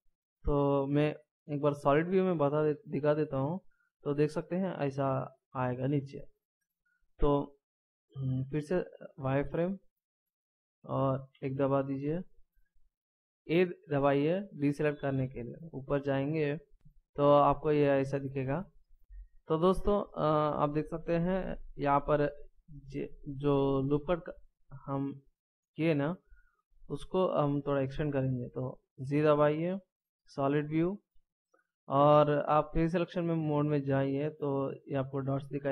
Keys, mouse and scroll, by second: 1.9 z, 4.6 middle click, 8.6 z, 11.3 KP_1, 13.6 a, 15.2-16.7 shift+scroll up 1, 18.0 scroll down 1, 23.8-24.4 shift+scroll up 1, 24.4-24.9 shift+scroll down 1, 24.9 scroll up 2, 27.4 scroll down 1, 29.0 z, 33.4 click.